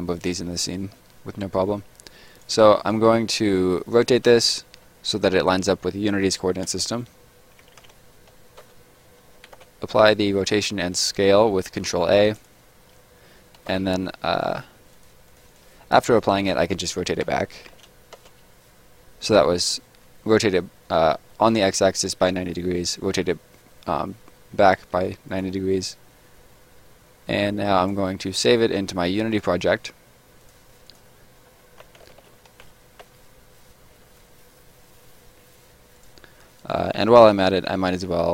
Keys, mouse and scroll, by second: 2.3 click, 3.4 middle click, 4.2 r, 5.0 right click, 5.4 r, 6.6 x, 7.7 9, 8.5 Return, 9.5 ctrl+a, 12.3 click, 13.6 ctrl+s, 14.9 click, 16.5 r, 17.6 9, 18.1 Return, 22.4 middle click, 25.3 click, 27.8 click, 31.6-32.8 typing, 35.9 click, 37.3 right click.